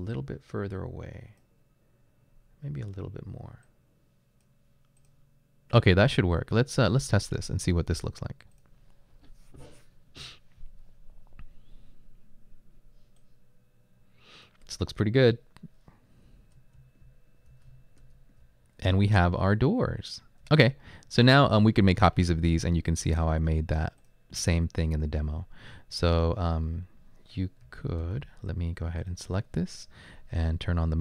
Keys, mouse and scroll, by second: 16.3 Left, 16.8 Up, 17.0 Right, 17.5 Right, 17.7 Up, 18.9 Right, 19.5 Right, 20.0 Right, 20.4 Up, 20.7 Left, 27.6-28.0 typing.